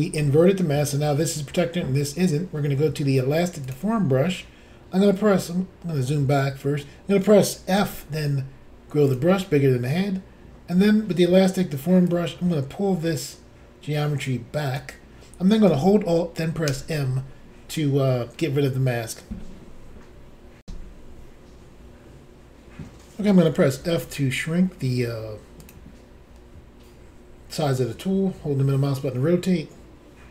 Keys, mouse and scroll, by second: 3.7 click, 3.7 click, 5.5-6.7 scroll down 1, 6.8 scroll down 1, 7.8 f, 9.1 click, 12.1 click, 16.7 alt+m, 20.6 Insert, 23.7 f, 25.6 click, 25.7 click, 27.8 middle click, 28.9 scroll up 2, 30.0 scroll up 1.